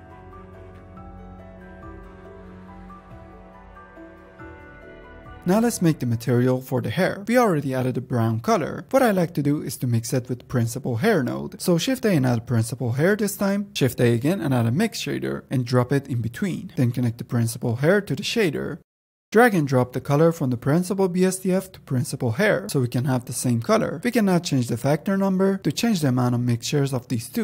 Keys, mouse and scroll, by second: 1.3-4.0 drag, 5.5-6.1 drag, 11.0 shift+a, 11.7 shift+a, 12.7 Down, 13.8 shift+a, 17.8-18.8 drag, 19.3 click, 24.0 click, 24.8-26.6 drag.